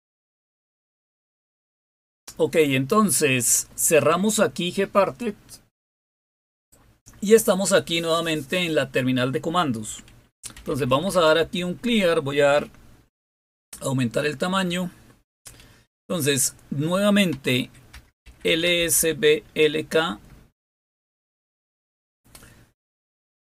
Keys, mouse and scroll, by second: 0.1 click, 0.3 click, 6.9 click, 10.3-11.6 typing, 17.3-19.5 typing, 20.9 Return.